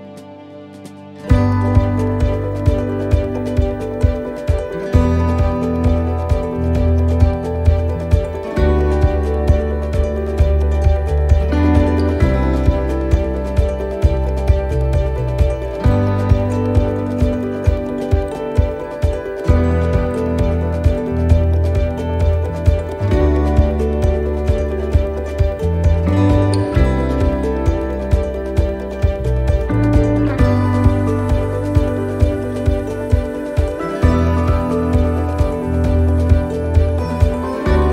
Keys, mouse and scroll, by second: 2.8 ctrl+r, 3.8 ctrl+r, 4.8 middle click, 5.5 shift+middle click, 7.6 right click, 8.8 right click, 10.3 shift+right click, 10.5 shift+right click, 10.7 middle click, 11.3 shift+middle click, 12.5 shift+right click, 12.8 shift+middle click, 15.1 shift+right click, 15.9 shift+middle click, 17.2 click, 18.9 ctrl+z, 19.4 middle click, 20.7 shift+right click, 21.5 shift+right click, 21.6 middle click, 22.7 shift+middle click, 23.8 click, 25.6 scroll down 2, 26.0 shift+middle click, 27.2 click, 28.3 shift+middle click, 29.0 shift+middle click, 29.5 scroll down 3, 29.8 shift+middle click, 30.4 middle click, 30.9 shift+middle click, 31.2 scroll up 2, 31.6 shift+middle click, 32.1 middle click, 32.6 shift+middle click, 33.0 scroll up 1, 33.7 right click, 34.2 scroll down 1, 36.6 click.